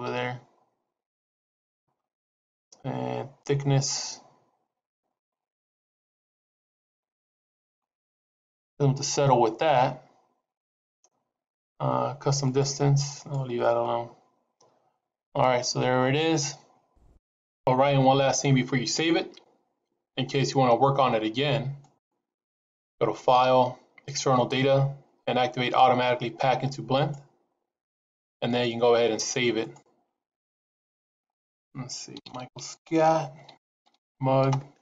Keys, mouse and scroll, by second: 3.4 click, 12.4 click, 13.1 click, 15.3-15.8 scroll down 2, 15.9 scroll up 3, 16.8 scroll down 1, 21.7 click, 28.4 click.